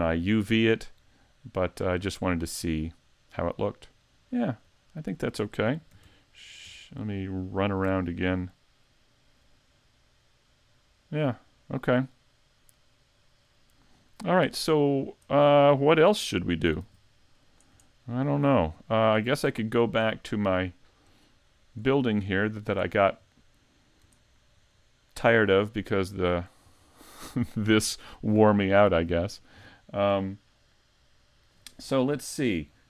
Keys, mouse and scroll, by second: 2.7 middle click, 4.3-4.8 scroll up 3, 4.8 shift+middle click, 5.9 shift+f, 14.9-15.3 scroll down 4, 15.3 middle click, 16.8 s, 17.9 shift+middle click, 18.4 scroll down 3, 19.0 shift+middle click, 19.8 middle click, 21.3 shift+middle click, 22.0 scroll up 3, 22.4 middle click, 22.9 shift+middle click, 23.8-24.2 scroll up 1, 24.2 shift+middle click, 24.8 middle click, 26.9 scroll down 2, 28.4 middle click.